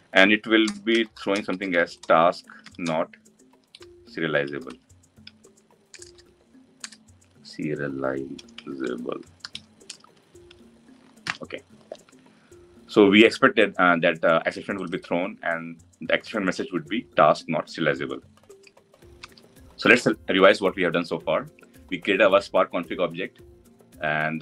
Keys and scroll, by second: 10.9 ctrl+alt+l.